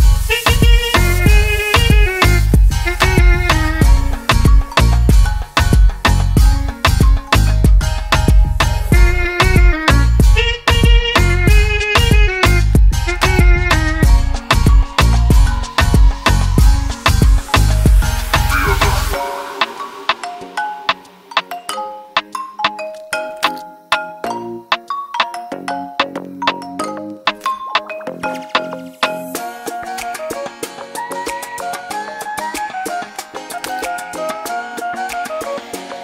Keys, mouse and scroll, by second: 1.2 click, 2.7 click, 4.5 click, 8.7 click, 20.3 click.